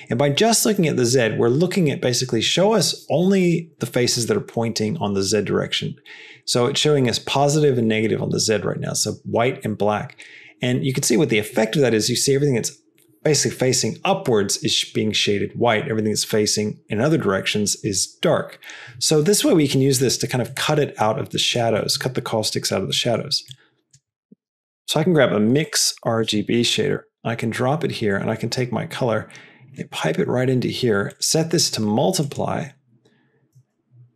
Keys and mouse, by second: 19.7 middle click, 20.5 middle click, 20.9 click, 21.8 middle click, 22.9 middle click, 23.4 click, 24.0 middle click, 24.5 shift+a, 28.4-30.5 drag, 31.2-33.8 drag.